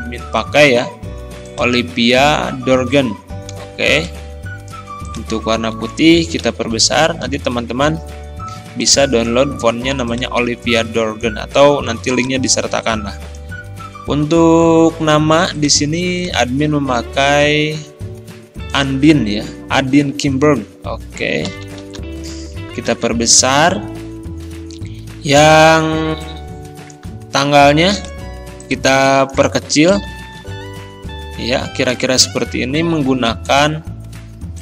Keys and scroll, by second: 5.5 ctrl+a, 6.4 ctrl+], 21.5 ctrl+], 27.3 ctrl+z, 29.9 ctrl+[.